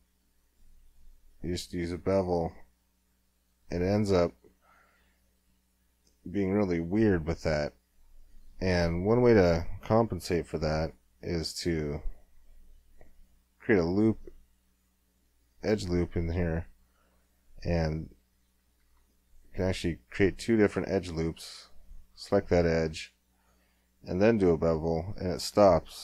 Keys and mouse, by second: 10.2 ctrl+r, 16.8 middle click, 17.0 middle click, 18.8 ctrl+r, 22.8 w, 23.7-26.0 middle drag.